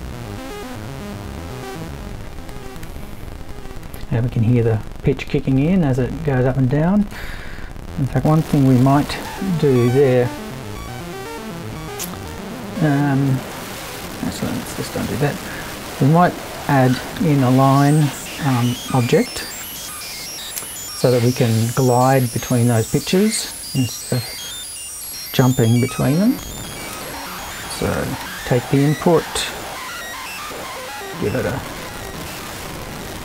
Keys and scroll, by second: 9.3 super+t, 14.5 super+z, 15.5 super+i, 16.5 super+l, 16.7-17.7 typing, 19.4 space, 19.6 0, 19.8 space, 19.9 l, 23.6 super+l, 25.5 BackSpace, 25.9 super+2, 27.9 shift+4, 28.2 shift+i, 29.0 i, 29.1 space, 30.3-31.2 typing.